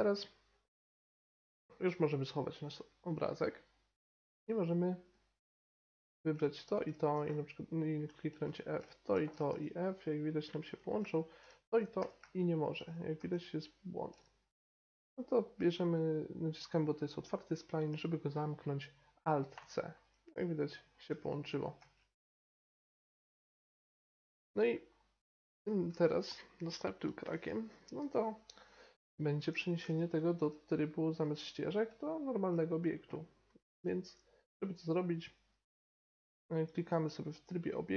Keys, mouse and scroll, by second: 2.6-7.3 drag, 4.3-6.2 right drag, 6.6-8.8 right drag, 7.1 f, 9.5 f, 11.9-13.1 right drag, 12.0 f, 13.1 f, 15.0-19.0 middle drag, 19.6 alt+c, 21.7 Tab, 22.5 middle click, 25.5-31.1 middle drag, 31.1-32.9 drag, 31.9 Tab, 33.4 a, 33.6 a, 35.1-37.1 middle drag, 37.0 Tab.